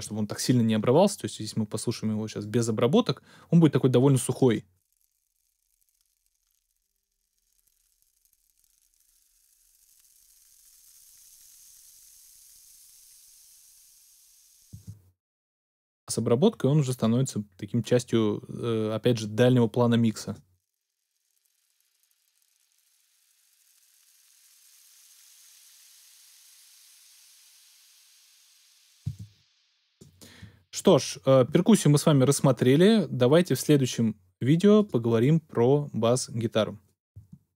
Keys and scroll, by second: 14.7 space.